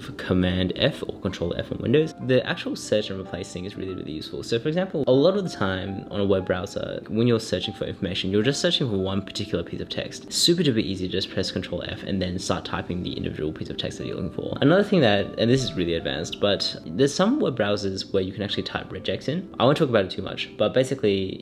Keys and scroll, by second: 11.4 super+f, 11.6-12.6 typing, 12.9 Return.